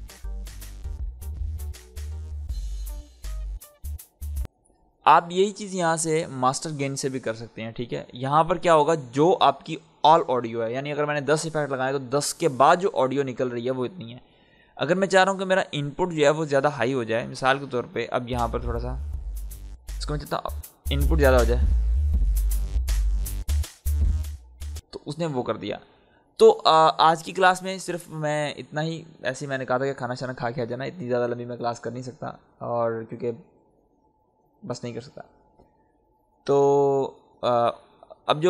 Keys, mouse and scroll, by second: 4.3 space, 16.0 click, 17.2 ctrl+z, 17.6 click, 17.6 click, 18.2 space, 18.4-19.8 scroll up 1, 19.8-23.7 drag, 23.7 ctrl+z, 24.7 space.